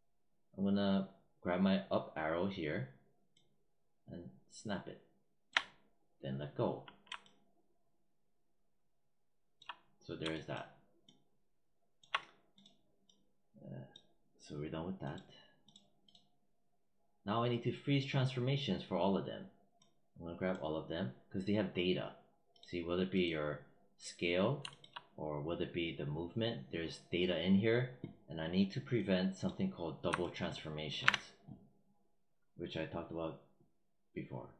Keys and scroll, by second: 30.9 w.